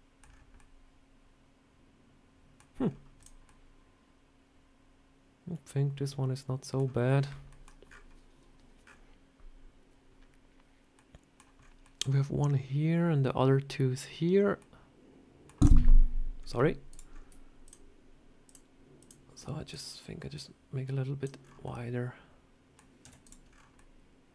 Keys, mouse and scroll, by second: 0.1 scroll down 3, 0.5 middle click, 2.7 scroll down 2, 3.1 click, 3.3 middle click, 14.5 middle click, 16.3 scroll up 4, 16.8 click, 17.0 scroll up 3, 17.5 shift+click, 19.6 shift+click, 20.2 click, 21.3 scroll down 4, 21.5 middle click, 22.9 z, 23.4 scroll down 3, 23.7 middle click.